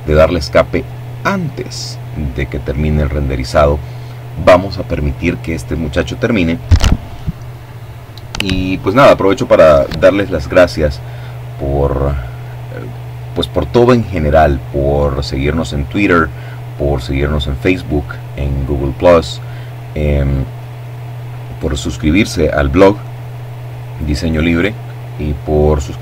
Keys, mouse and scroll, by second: 24.9 Escape, 25.7 Escape.